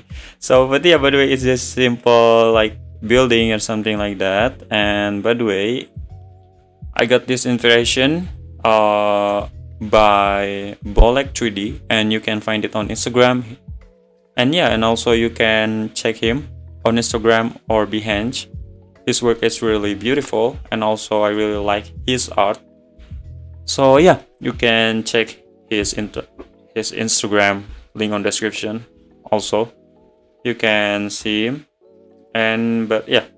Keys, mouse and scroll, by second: 0.3 `, 0.8 scroll down 2, 1.6 click, 3.5 click, 3.8 scroll down 5, 4.0-4.8 middle drag, 4.8 `, 5.9 click, 7.5 shift+click, 8.3 click, 10.0 shift+click, 10.7 click, 11.8 click, 12.8 click, 14.9 `, 17.4 click, 19.7 click, 20.1-20.5 middle drag, 20.5 scroll down 2, 20.7-21.2 middle drag, 21.2 click, 22.7 scroll down 2, 23.0-23.3 middle drag, 30.0 `.